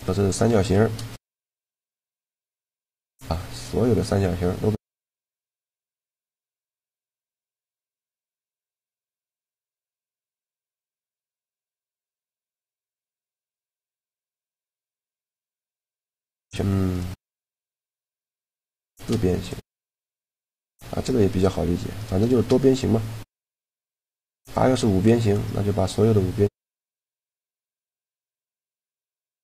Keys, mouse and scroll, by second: 0.3 shift+g, 3.5-4.8 drag, 7.0-8.2 middle drag, 9.8-11.6 middle drag, 13.2-14.9 middle drag, 16.6 right click, 17.0 shift+g, 17.7-19.8 right drag, 18.6 shift+g, 21.4 a, 22.2 shift+g, 26.2-28.2 middle drag, 28.2-29.4 drag.